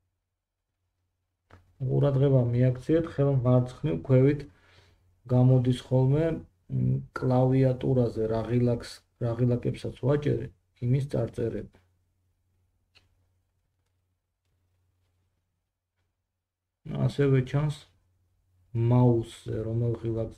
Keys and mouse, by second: 3.6 g, 8.1-10.2 middle drag, 10.2 KP_1, 10.9 KP_3, 12.5-14.0 middle drag, 14.7 click, 18.2 drag.